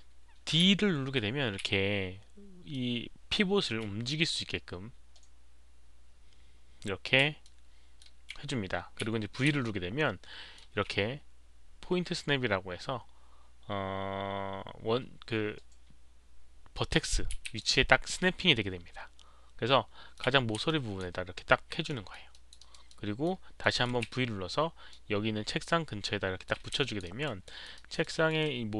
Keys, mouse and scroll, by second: 0.4-3.6 typing, 0.6 alt+click, 0.6 alt+middle click, 2.0 click, 2.7 alt+click, 2.7 alt+middle click, 3.6 alt+middle click, 5.5 click, 5.5 alt+middle click, 5.5 d, 7.4-8.0 middle drag, 7.4 click, 7.4 d, 9.1 middle click, 9.1 click, 9.1 d, 9.5 v, 9.6-10.5 middle drag, 10.5 d, 17.0-19.4 typing, 17.6-20.1 middle drag, 20.6-21.0 alt+drag, 21.8 alt+middle drag, 22.3 alt+drag, 22.5 alt+right drag, 22.8-23.2 alt+middle drag, 23.6 alt+middle drag, 24.9-26.4 alt+middle drag, 24.9 alt+right click, 24.9 alt+click, 24.9 v, 26.8 alt+click, 27.0 alt+right click, 27.4 alt+middle drag, 27.4 v, 27.7 alt+right drag, 28.0 alt+middle drag.